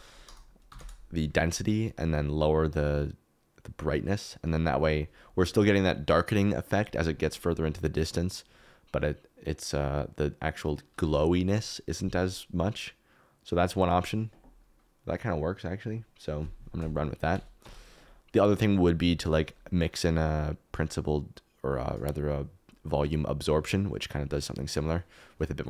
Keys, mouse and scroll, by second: 8.2 click, 17.6 KP_Decimal.